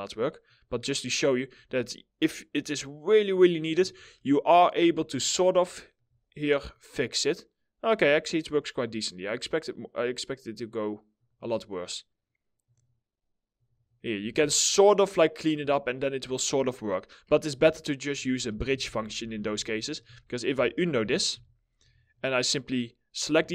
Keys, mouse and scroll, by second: 0.2 right click, 3.0 right click, 3.7 alt+middle click, 4.6 alt+middle click, 5.2 alt+middle click, 10.9 right click, 13.2 right click, 13.6 scroll down 1, 14.0 alt+middle click, 15.2 alt+middle click, 15.2-15.6 scroll up 1, 15.6 middle click, 17.2 alt+middle click, 18.0 ctrl+z, 20.3-21.8 typing, 22.9 2, 23.4 alt+middle click.